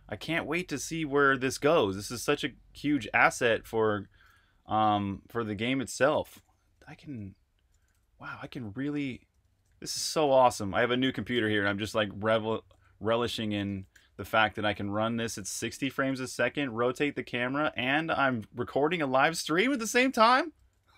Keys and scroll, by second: 0.0-19.8 typing.